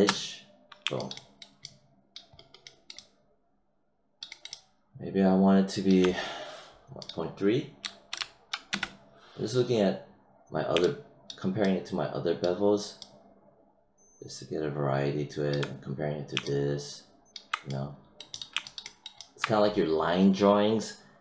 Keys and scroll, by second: 7.8 ., 8.1 3, 8.6 Return.